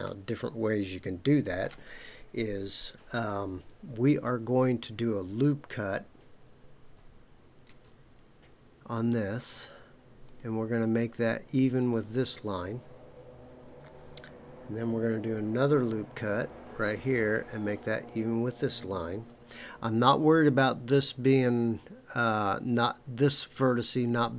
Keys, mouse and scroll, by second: 0.0-1.6 middle drag, 7.6 ctrl+r, 11.9 click, 15.6 ctrl+r, 18.0 click.